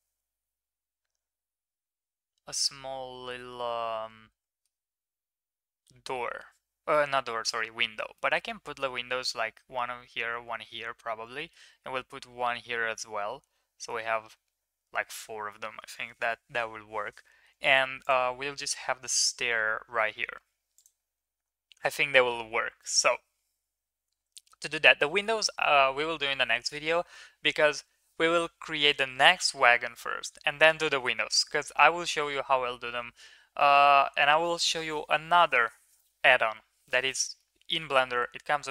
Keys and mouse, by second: 3.3-4.7 middle drag, 8.1 middle click, 11.3 middle click, 17.2 middle drag, 18.0 click, 22.8 middle click, 23.8 ctrl+s, 24.3 middle click.